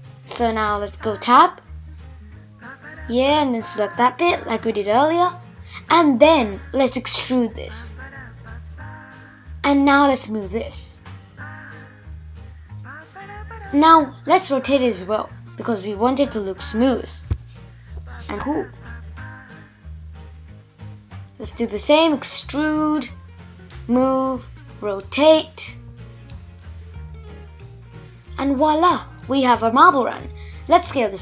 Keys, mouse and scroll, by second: 0.6 alt+z, 1.6 click, 3.6 alt+z, 4.8 e, 7.5 g, 11.4 r, 13.7-16.7 middle drag, 17.9 click, 18.5-19.0 scroll down 1, 19.0 e, 20.2-21.1 scroll down 4, 21.1 g, 22.8 r, 24.0-26.5 middle drag, 26.5 Tab, 27.0 click, 27.5 click, 28.3 s, 29.1-29.6 scroll up 4, 29.6 space, 31.0 shift+Left.